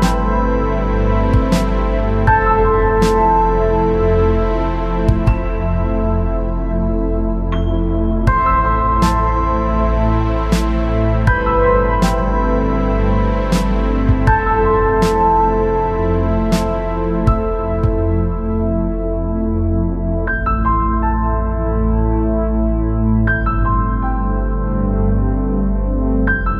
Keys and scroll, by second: 13.2 ctrl+=, 16.5 Up, 17.7 Down, 19.4 Left, 20.6 ctrl+c, 20.8 ctrl+v.